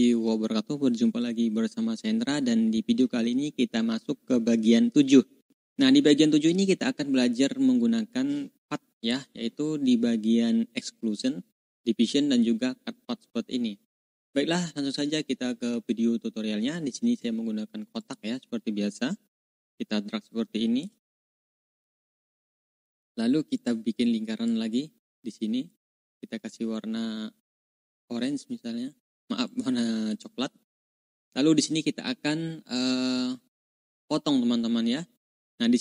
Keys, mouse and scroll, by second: 8.9 click, 14.1 click, 17.9 click, 18.6-19.3 ctrl+scroll up 4, 19.8 click, 21.0-21.6 ctrl+scroll up 2, 23.4 click, 24.4-25.7 drag, 27.5 click, 29.3 click, 30.1-30.4 ctrl+scroll down 2, 31.2 ctrl+scroll up 2, 33.5 ctrl+scroll down 2, 35.3-35.8 drag.